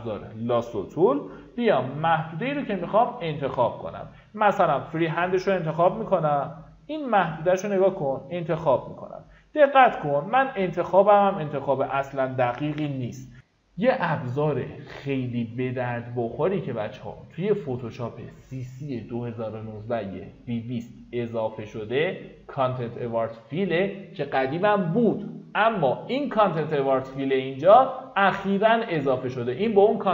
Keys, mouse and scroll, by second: 2.0 shift+i, 2.5 shift+i, 4.3-11.7 drag, 12.4 alt+click.